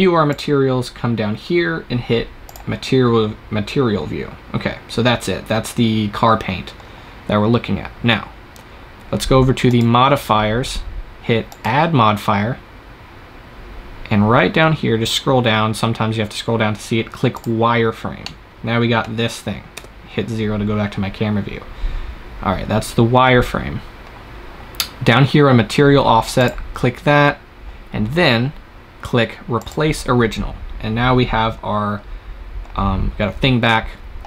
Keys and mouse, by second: 0.2-2.2 drag, 3.8-7.0 drag, 9.5-17.3 drag, 18.1 middle click, 18.6-19.6 drag, 19.6 KP_0, 26.3-28.2 drag, 29.5-33.7 drag.